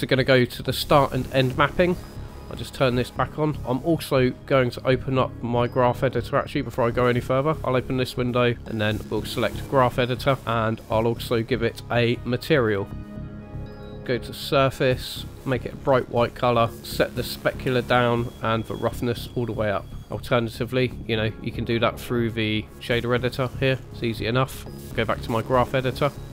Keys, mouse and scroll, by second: 0.8 click, 2.8 click, 6.0 click, 8.2 click, 11.2 click, 12.6 click, 13.3 click, 13.5-15.2 scroll down 5, 13.7 click, 15.4 click, 17.3 click, 18.8 click, 20.8 click, 23.7-24.0 scroll up 4, 23.9 middle click, 24.9 click, 26.0 click.